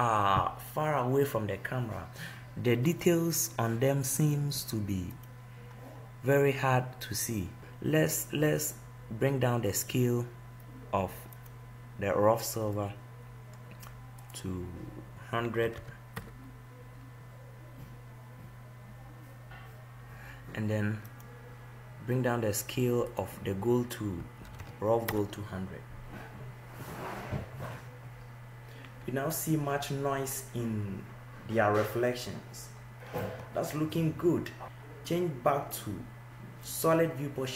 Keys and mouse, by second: 3.3-12.0 right drag, 12.0-14.7 middle drag, 19.7-22.0 drag, 22.0 0, 25.1-26.2 right drag.